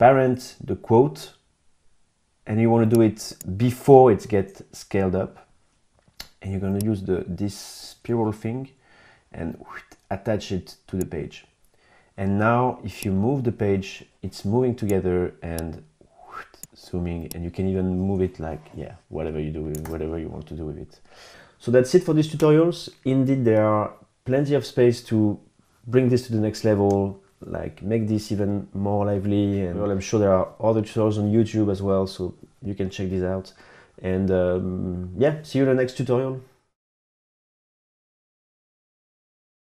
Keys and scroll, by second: 19.9 super+z.